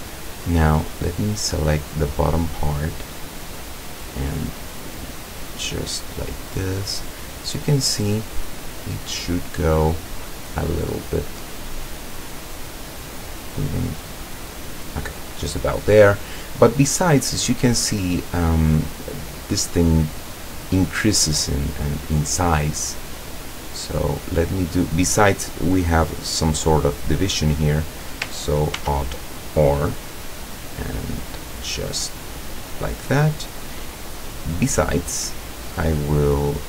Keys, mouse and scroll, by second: 1.0 right click, 2.7 middle click, 4.4-7.4 drag, 7.7-8.9 middle drag, 9.1 middle click, 9.6 middle click, 10.6-12.4 middle drag, 13.4-15.2 drag, 17.1 middle click, 17.7 middle click, 17.9-18.9 middle drag, 19.7 middle click, 20.3 middle click, 21.0 middle click, 23.0-24.7 middle drag, 28.8 ctrl+r, 29.7 click, 33.0 click.